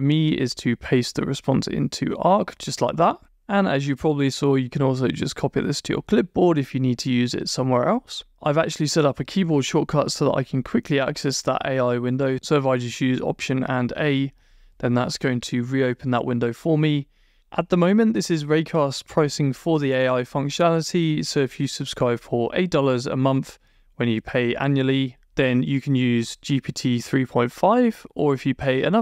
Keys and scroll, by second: 1.4 super+Return.